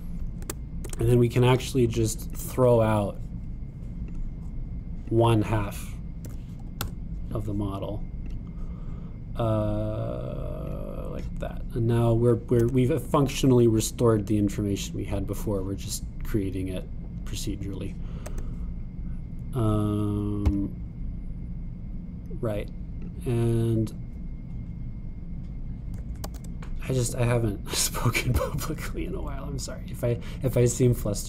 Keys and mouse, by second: 1.4 Tab, 1.8 Tab, 3.4-7.6 drag, 7.3 x, 10.2-16.7 drag, 13.7 Tab, 19.3 Tab, 19.5-21.3 drag, 27.3 super+r.